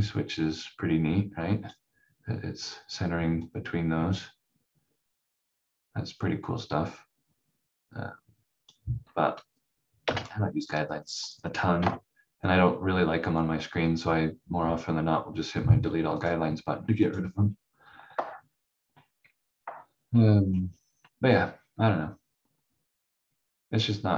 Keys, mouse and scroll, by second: 10.0 Delete, 11.2 click, 11.8 F4, 16.2 click, 20.0 scroll up 1.